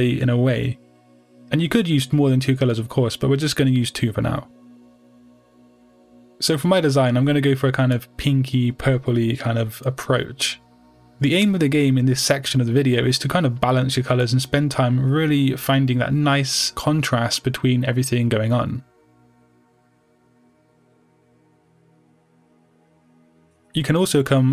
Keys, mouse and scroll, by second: 1.4-3.3 drag, 8.2-13.3 drag, 16.7-22.9 drag.